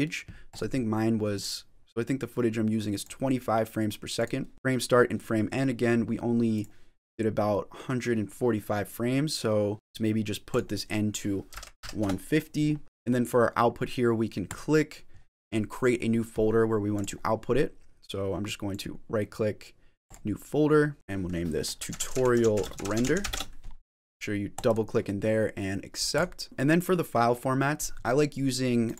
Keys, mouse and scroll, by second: 0.4 click, 4.0 click, 4.5-5.4 scroll down 3, 6.4 click, 10.3 click, 12.8 click, 12.8-13.9 scroll down 1, 14.3 click, 26.4 click, 28.7 click.